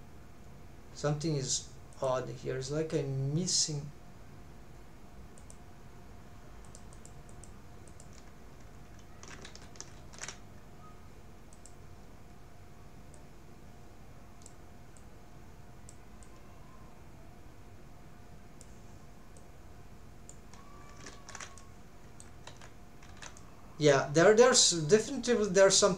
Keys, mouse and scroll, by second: 1.9-8.3 drag, 9.5 ctrl+alt+shift+z, 10.0 ctrl+alt+shift+z, 11.5-20.6 drag, 21.1 ctrl+alt+shift+z, 21.6 middle click, 22.5 alt+z, 23.2 alt+z, 23.4 middle click.